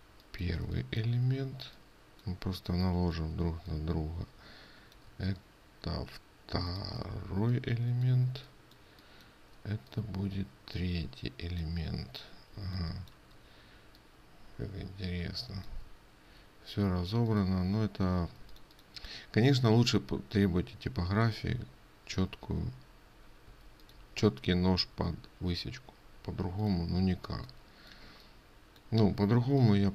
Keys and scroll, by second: 13.1 ctrl+space, 18.8 ctrl+space.